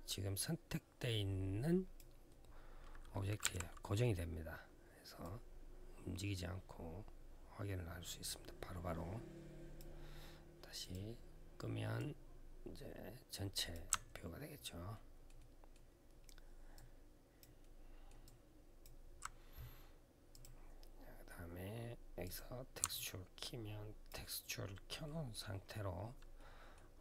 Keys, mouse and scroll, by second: 3.2 t, 5.0 click, 10.6 click, 11.7 click, 13.9-14.6 alt+scroll down 1, 14.7 alt+middle click, 15.1 alt+middle click, 16.1-16.5 alt+scroll down 1, 16.5 alt+click, 17.4 alt+middle click, 18.0 alt+click, 20.1 click, 22.0 click, 22.7 alt+click, 24.1 alt+scroll up 1, 24.8 alt+middle click, 25.4-26.1 alt+scroll up 1, 26.1 alt+middle click, 26.7 alt+click.